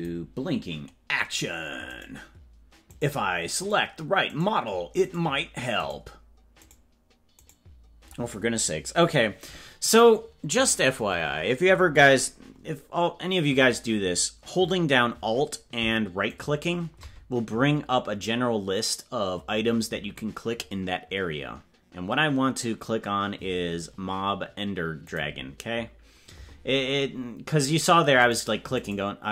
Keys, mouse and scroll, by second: 0.0 click, 1.4-2.1 right drag, 3.1 right click, 6.0 right click, 23.5-29.3 right drag.